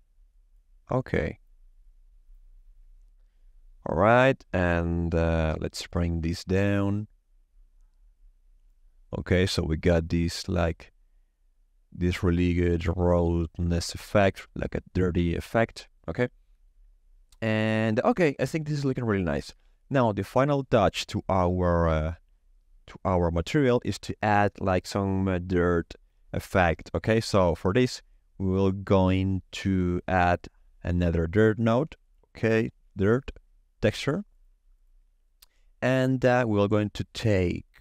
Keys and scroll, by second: 31.8-33.6 typing.